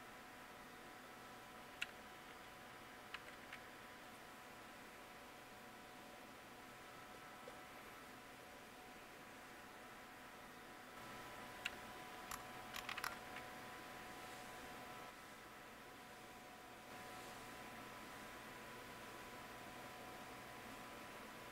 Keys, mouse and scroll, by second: 4.0 Return, 4.0 typing, 12.7 ctrl+c.